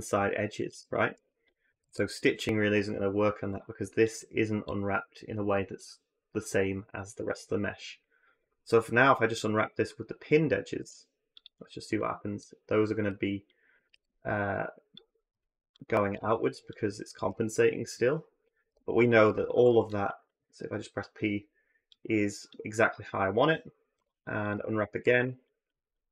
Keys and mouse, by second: 0.5 ctrl+z, 1.5 a, 1.7 a, 10.6 u, 13.7 ctrl+z, 18.5 p, 19.3 a, 19.5 a, 21.8-22.4 drag, 23.8 u, 24.8 a, 25.0 a, 25.4 click, 25.9 click.